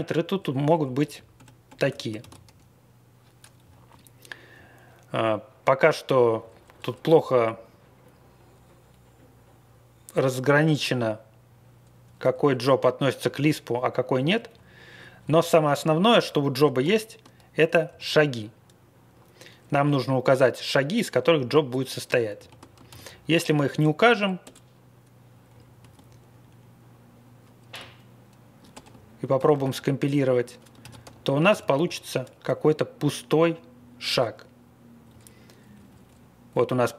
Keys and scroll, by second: 0.5 Down, 1.3 super+=, 1.6 super+=, 2.2 ctrl+x, 3.6 Down, 4.5 Down, 6.1 Up, 7.0 Up, 7.6 Right, 8.0 Right, 12.0 Down, 14.5 Down, 15.1 Down, 15.7 Down, 16.9 ctrl+l, 17.8 m, 22.3 ctrl+g, 22.8 ctrl+x, 23.4 b, 24.4 Return, 25.5 Right, 25.8 space, 28.7 BackSpace, 29.4 ctrl+c, 29.5 ctrl+c, 30.8 ctrl+x, 31.5 ctrl+x, 33.7 Down, 35.1 Down, 35.2-35.5 Down, 35.7 Down, 35.8 Down, 36.0 Down, 36.5 Up, 36.6 Up, 36.8 Up, 36.9 Up.